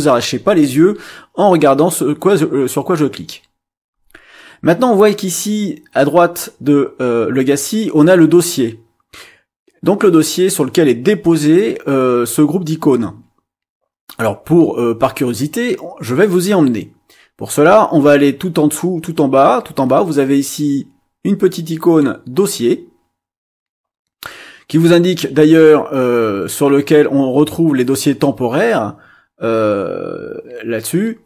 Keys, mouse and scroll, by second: 21.7 click.